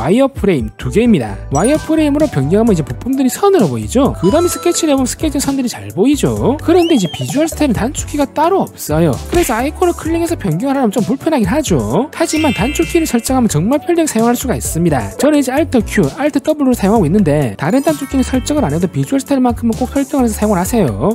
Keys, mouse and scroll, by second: 15.4 alt+q, 15.9 alt+w, 16.7 alt+q, 17.4 alt+w, 18.1 alt+q, 19.0 alt+w.